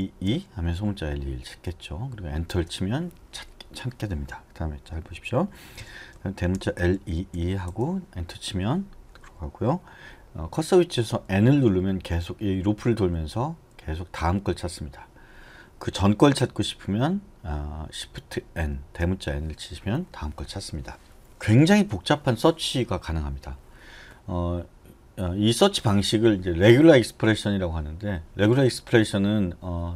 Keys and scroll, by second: 2.5 Return, 5.8-6.9 typing, 7.7 Return, 11.3-14.6 typing, 18.5 shift+n.